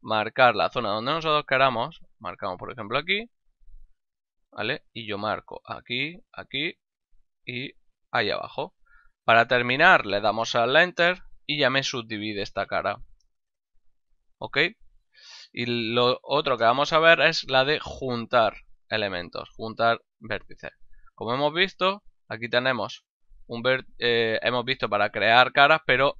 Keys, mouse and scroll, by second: 2.8 click, 5.5 click, 7.9 click, 10.9 Return, 10.9 KP_Enter, 12.0 middle click, 15.5 middle click, 16.2 ctrl+middle click, 16.7 middle click, 21.2 ctrl+Tab, 21.8 click, 22.5 right click.